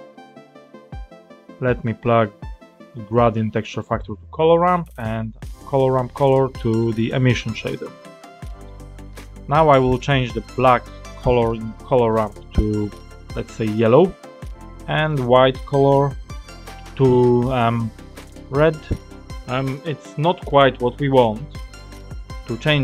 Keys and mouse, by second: 0.6 click, 2.3-3.9 drag, 4.3 click, 5.6-7.0 drag, 8.3 click, 11.8 click, 15.0 click, 19.4 click.